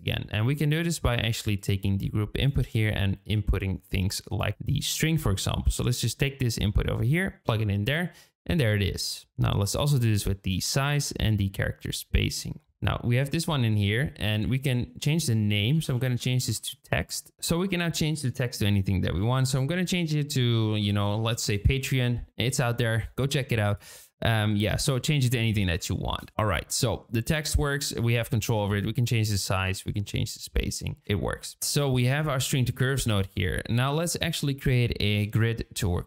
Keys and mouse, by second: 1.6 click, 4.6-6.9 drag, 9.7-10.5 drag, 11.3-12.3 drag, 13.7-17.1 drag, 17.3-23.4 drag, 23.7-26.3 drag, 27.1 shift+click, 28.5 click, 29.7-30.7 drag, 31.0 ctrl+z, 31.6 click, 32.4 shift+click, 33.0 click.